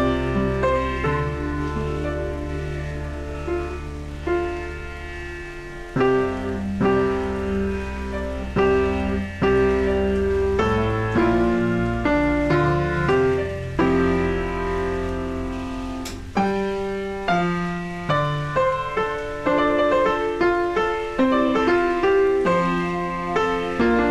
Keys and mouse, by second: 2.0 right click, 2.3 click, 2.9 right click, 3.2 click, 4.0 click, 7.8 a, 8.6 click, 9.0 KP_0, 9.6 BackSpace, 9.8 KP_1, 10.1 Return, 10.7 a, 12.0 click, 13.3 click, 14.1 shift+click, 16.2 click, 16.5 a, 16.5 click, 17.5 click, 17.8 ctrl+e, 17.9 shift+click, 20.2 click, 20.7 a, 20.8 click.